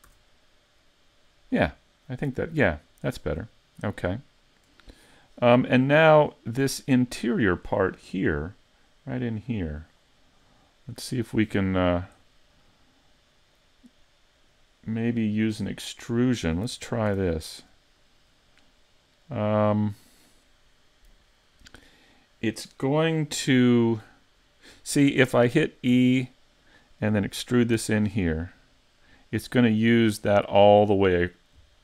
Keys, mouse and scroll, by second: 0.1 a, 0.8 middle click, 5.0-5.7 scroll up 2, 5.5 middle click, 6.3 shift+middle click, 6.8 middle click, 10.5 middle click, 12.6 middle click, 16.7 ctrl+Tab, 17.6 right click, 18.0 middle click, 25.9 e, 26.7 click, 27.8 s.